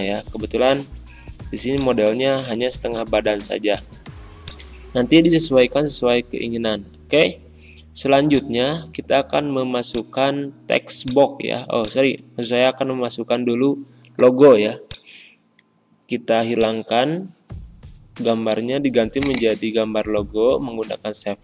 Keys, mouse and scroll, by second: 1.6 click, 2.2 ctrl+scroll up 1, 3.1-4.3 scroll up 3, 4.3 click, 6.3 ctrl+scroll up 1, 7.1-8.2 scroll up 1, 8.2 click, 13.4 click, 19.1 click.